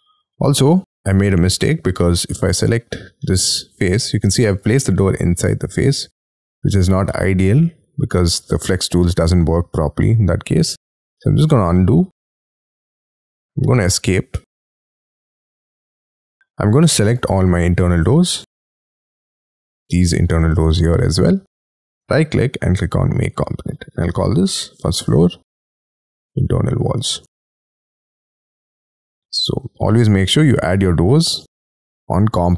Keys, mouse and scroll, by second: 1.0 scroll down 6, 1.2 y, 1.9 space, 3.2 middle click, 7.0 middle click, 11.0 ctrl+z, 11.5 ctrl+z, 12.0 ctrl+z, 12.9 scroll down 7, 13.3 Escape, 14.9 double click, 15.1 double click, 16.2 middle click, 16.8 double click, 17.0 double click, 17.6-18.3 scroll down 11, 18.3-18.8 scroll up 11, 19.3 ctrl+click, 19.5 ctrl+double click, 19.6 ctrl+click, 19.8 ctrl+click, 20.6-21.1 scroll down 6, 21.1 middle click, 21.8 right click, 21.9 right click, 23.8-28.4 typing, 24.0 right click, 29.1 scroll up 6.